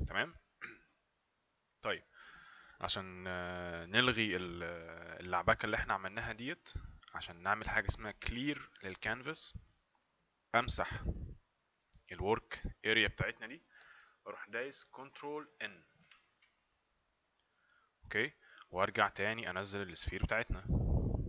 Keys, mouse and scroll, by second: 1.4 click, 16.0 ctrl+n, 20.2 click.